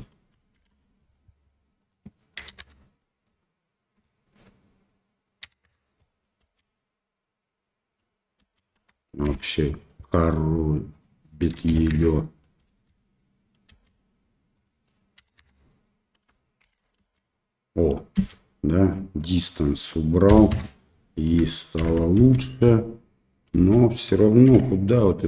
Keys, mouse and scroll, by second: 0.1 space, 0.5 shift+Left, 1.8-3.0 drag, 4.0-6.0 drag, 6.4 space, 8.9 shift+space, 9.2 shift+Left, 11.0-12.3 drag, 12.7 space, 14.0 space, 14.5-15.8 drag, 16.6 shift+Left, 17.0 space, 18.2 space, 19.3-20.9 drag, 21.8 shift+Left, 22.2 space, 23.6 space, 24.5 shift+Left.